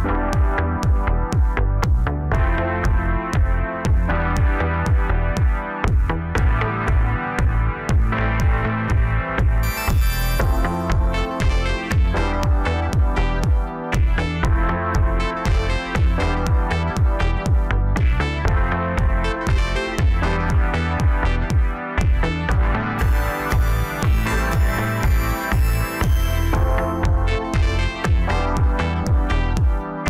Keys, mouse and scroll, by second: 2.4 s, 6.3 s, 9.7 KP_7, 10.3-10.9 scroll down 1, 10.9 e, 14.0 s, 15.6 e, 16.9 s, 18.5 Tab, 19.1-21.3 middle drag, 21.3 Tab, 21.8-23.1 middle drag, 23.1 KP_7, 24.8 click, 25.4 click, 26.2 click, 26.7 shift+click, 27.5 KP_1, 28.7 click, 29.6 g.